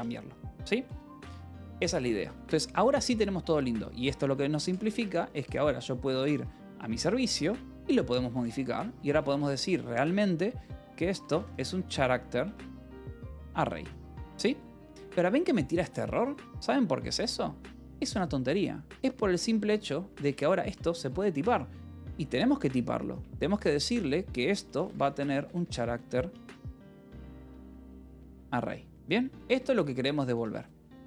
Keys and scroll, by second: 1.5 k, 2.1 j, 3.1 j, 4.2-5.8 typing, 6.6 Return, 7.8-12.9 typing, 12.3 Return, 13.4 Escape, 14.4 j, 15.2 h, 18.8 b, 20.1 h, 20.6 a, 21.8 [, 22.3 BackSpace, 22.5 ], 23.0 BackSpace, 24.1 Left, 24.5-28.7 typing, 29.4 Escape, 29.9 j, 30.9 ctrl+s.